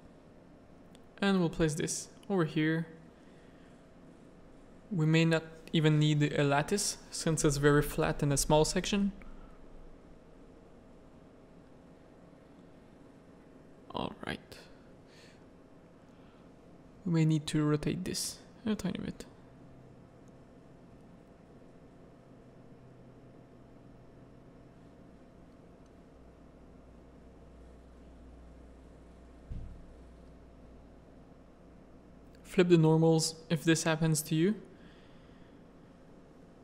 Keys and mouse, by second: 0.3 click, 2.3 KP_3, 3.2 shift+middle click, 4.1 r, 6.1 click, 6.7-7.9 middle drag, 8.5 middle click, 9.7-10.9 drag, 11.2 middle click, 11.7 shift+middle click, 12.0 middle click, 12.5 r, 13.6-15.3 middle drag, 16.0-17.7 middle drag, 17.9 r, 21.9-25.0 drag, 25.0 Tab, 25.3 middle click, 25.7 alt+a, 26.3 z, 30.2 middle click, 32.2 Tab, 32.4 a, 32.5 middle click, 32.8 z, 34.1 s.